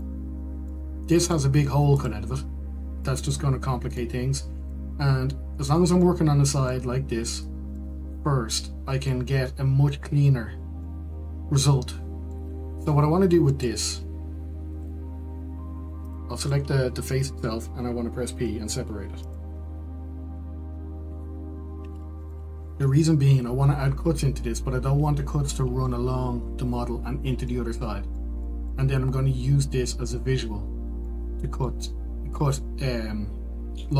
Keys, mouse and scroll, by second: 1.3-2.6 middle drag, 2.6 click, 4.3 middle click, 5.2-15.7 middle drag, 16.0 Tab, 17.4 Left, 20.6 p, 23.6-33.9 middle drag.